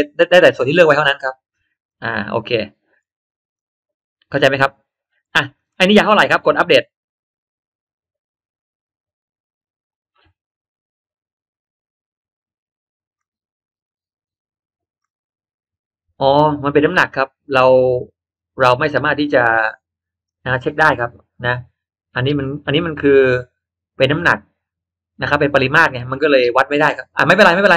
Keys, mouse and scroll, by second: 0.2 middle click, 0.6 scroll down 1, 0.8 middle click, 0.9 click, 1.9 click, 3.0 middle click, 3.5 click, 4.5 click, 5.2 click, 5.6 middle click, 7.1 click, 13.1 click, 14.9-16.7 drag, 20.2 click.